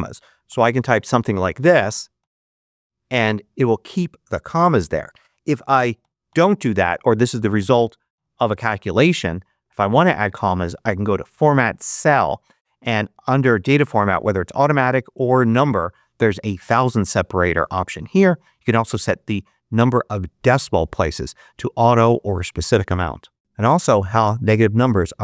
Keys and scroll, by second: 0.0-1.6 typing, 2.5 Return, 5.3 1.